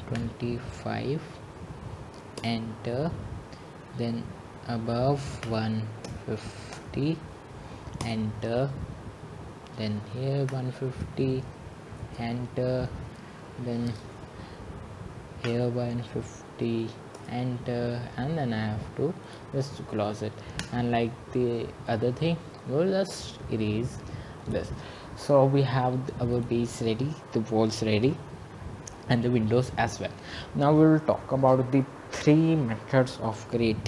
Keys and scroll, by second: 2.4-3.1 typing, 5.8 Return, 8.2-9.0 typing, 10.9 Return, 15.8 Return, 20.9 Return.